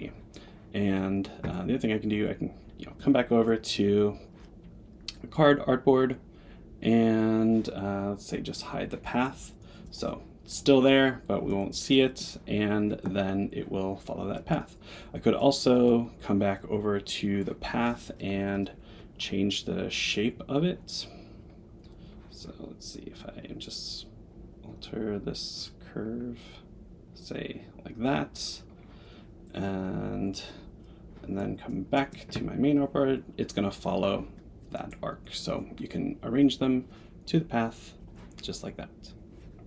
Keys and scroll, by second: 1.3 Tab, 15.8 Tab, 18.2 Return.